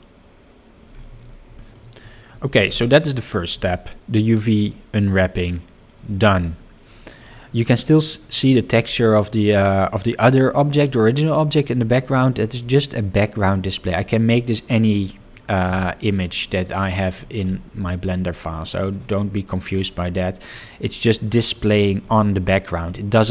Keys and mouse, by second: 1.7 middle click, 6.1 middle click, 12.5-20.9 drag.